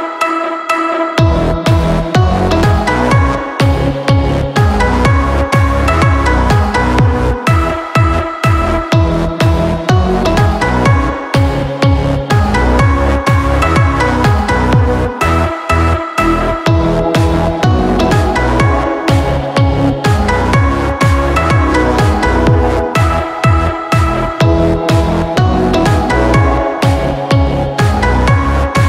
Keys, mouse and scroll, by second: 24.7 ctrl+Return.